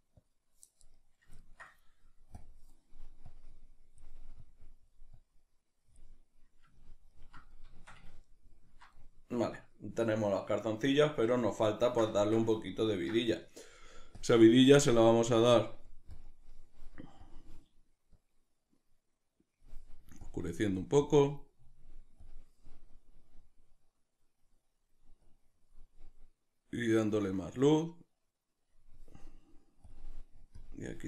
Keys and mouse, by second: 3.3-6.5 drag, 6.5-16.4 middle drag, 16.4 click.